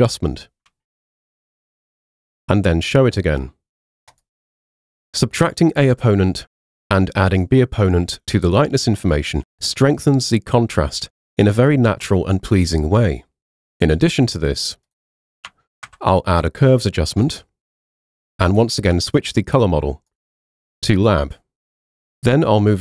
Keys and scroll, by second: 15.9 super+m.